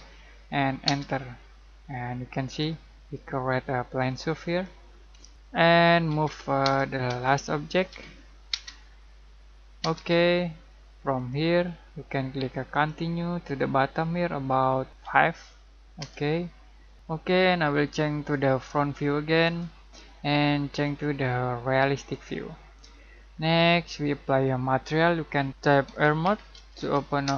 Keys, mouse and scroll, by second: 2.4 click, 5.2 Escape, 6.0 m, 7.0 space, 7.9 l, 8.5 space, 11.1 click, 15.0 5, 16.0 Return, 16.9 ctrl+z, 18.3 click, 23.3-23.6 scroll down 1, 23.6-25.5 middle drag, 25.6-27.2 typing.